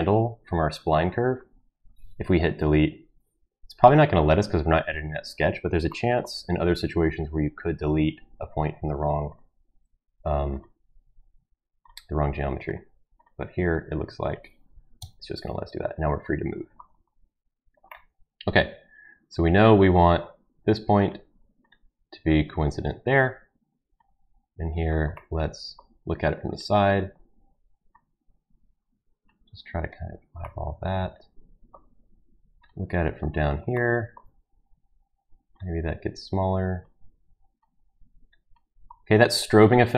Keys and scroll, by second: 2.5 Delete, 15.0 Delete.